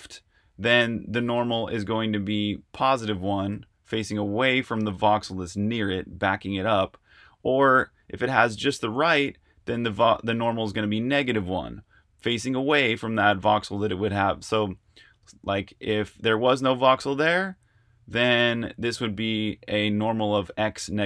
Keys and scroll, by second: 14.3 r.